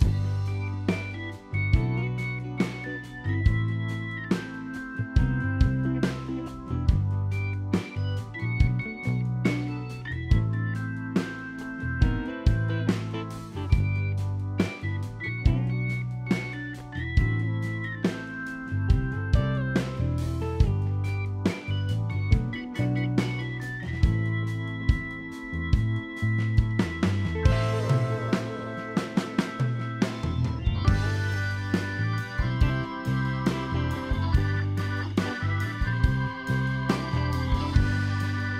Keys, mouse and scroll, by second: 0.4 f, 0.5 scroll down 3, 0.6 middle click, 1.6 scroll down 1, 1.6 middle click, 1.9 scroll up 3, 2.0 middle click, 3.1 ctrl+click, 4.9 ctrl+click, 6.2 middle click, 6.5 scroll down 2, 6.6 shift+middle click, 6.7 middle click, 6.8 scroll up 3, 7.0 middle click, 8.1 click, 8.6 click, 9.9 middle click, 10.8 click, 11.3 click, 12.2 ctrl+click, 12.7 middle click, 12.8 scroll down 3, 12.9 middle click, 14.2 middle click, 15.7 middle click, 16.5-16.9 scroll up 3, 16.6 middle click, 17.4 click, 18.5 scroll down 1, 18.5 middle click, 19.2 click, 20.1 click, 20.4 scroll down 3, 20.8 scroll up 2, 20.8 middle click, 22.1 click, 22.9 middle click, 23.3 click, 23.8 middle click, 24.1 scroll up 1, 24.3 ctrl+r, 26.1 click, 26.5 middle click, 28.7 f, 28.8 middle click, 29.3 scroll up 1, 29.5 ctrl+r, 30.7 middle click, 31.6 ctrl+click, 32.2 middle click, 33.6 click, 34.3 click, 34.9 ctrl+click, 35.0 ctrl+click, 36.1 middle click, 37.0-37.5 scroll up 1, 37.5 middle click, 37.5 click, 37.9 click, 38.2 scroll down 3, 38.3 middle click.